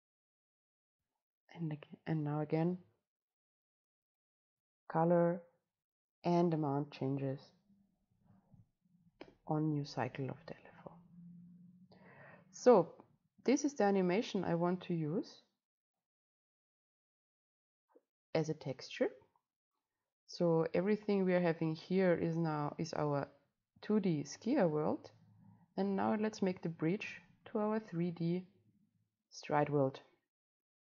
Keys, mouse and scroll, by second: 9.6 Delete, 11.1-12.7 drag, 11.1 scroll up 1, 24.8-26.3 drag, 26.3-30.4 right drag, 30.4 click.